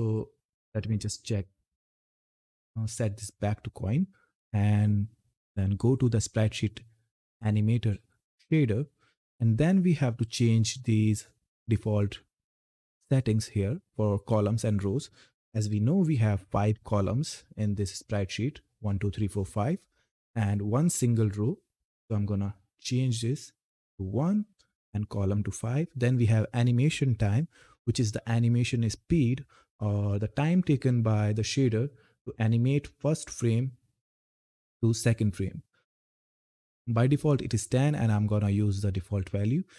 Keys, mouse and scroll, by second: 5.2-9.9 drag, 13.9 click, 20.1 click, 24.1 click, 24.1 Return, 36.1 click.